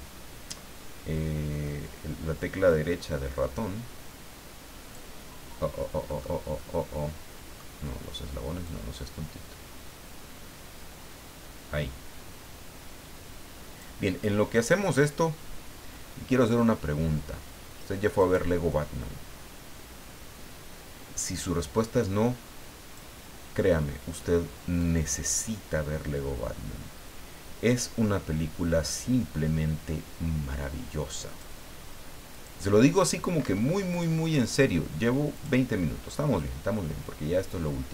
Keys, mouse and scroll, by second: 2.7-5.1 drag, 6.1 middle click, 6.5-7.8 middle drag, 8.6-14.0 drag, 14.9-18.3 drag, 18.7-23.1 drag, 24.8-31.6 drag, 32.3 click, 33.4 Escape, 33.9 click, 35.3 click, 36.2-37.9 middle drag.